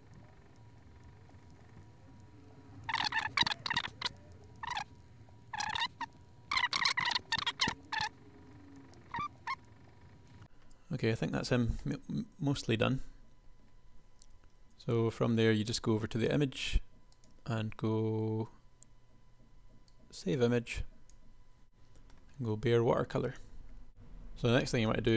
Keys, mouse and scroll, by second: 4.7-5.8 drag, 6.1-7.3 drag, 10.4 KP_1, 14.3 KP_1.